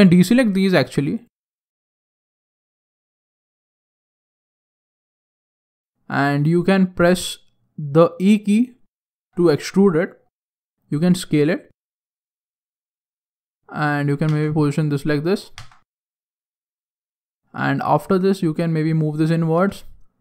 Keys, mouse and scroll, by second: 5.8 shift+right click, 9.1 e, 9.7 click, 10.3 s, 12.7 click, 14.2 Tab, 14.7 scroll down 4, 14.9 middle click, 15.5 Tab, 15.8-16.3 scroll up 4, 16.1 middle click, 17.9 click, 19.5 Tab, 19.7 middle click.